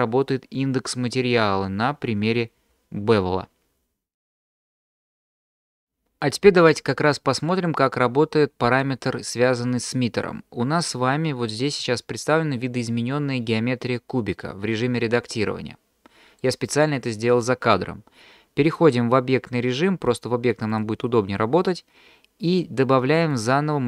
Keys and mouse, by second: 15.4-16.4 middle drag, 18.9-20.8 drag, 23.3-23.8 drag.